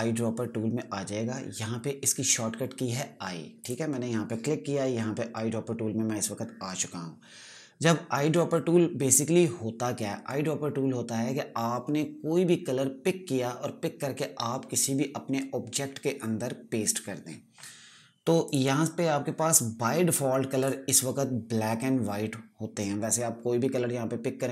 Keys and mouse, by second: 5.0 click, 19.0 click.